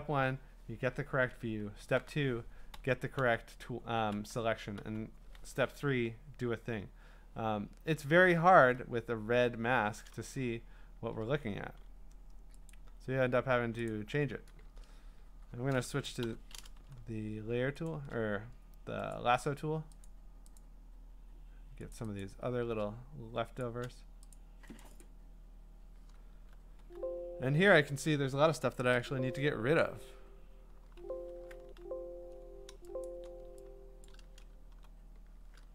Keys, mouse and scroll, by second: 1.9-4.9 typing, 8.6 q, 12.7 click, 16.2 l, 17.9 shift+click, 19.1 click, 20.2 click, 20.3 shift+click, 20.7 click, 21.2 shift+click, 21.9 click, 22.3 click, 23.6 shift+click, 23.7 shift+click, 24.4 click, 24.9 click, 25.1 click, 25.2 shift+click, 26.8 q, 28.9 q, 30.3 q, 30.8 b, 31.6 q, 33.0 click, 34.1 click, 34.5-35.7 typing.